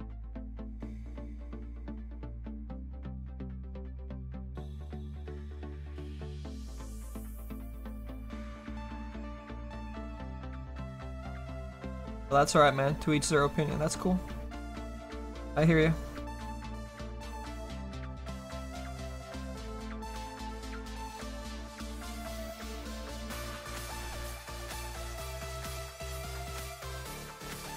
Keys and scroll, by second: 11.8 s.